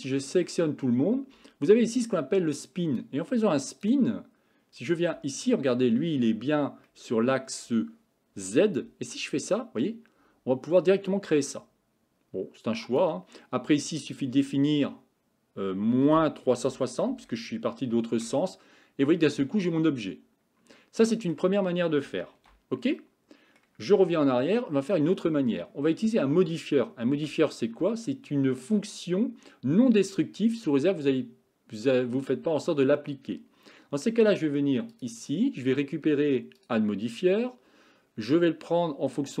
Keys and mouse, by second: 0.1 a, 0.4 a, 3.0 click, 6.9 middle click, 8.9-13.2 drag, 14.1-18.3 drag, 19.8-21.4 middle drag, 22.4 ctrl+z, 23.0 middle click, 24.1 Tab, 27.2 KP_1, 35.0 click, 36.6-39.4 drag.